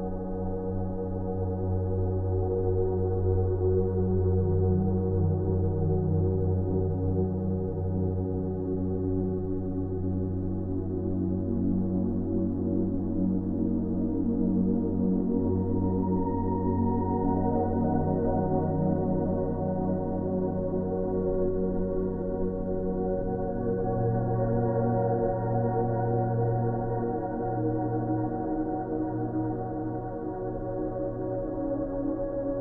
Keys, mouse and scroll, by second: 0.5 ctrl+space, 0.9 ctrl+click, 1.0-1.5 ctrl+space, 1.5 ctrl+space, 2.4 scroll up 1, 3.0 space, 3.3-3.9 ctrl+drag, 9.3 ctrl+space, 9.4 ctrl+click, 9.8 ctrl+space, 10.1 ctrl+space, 11.1 alt+click, 23.6 scroll up 1, 25.6 click.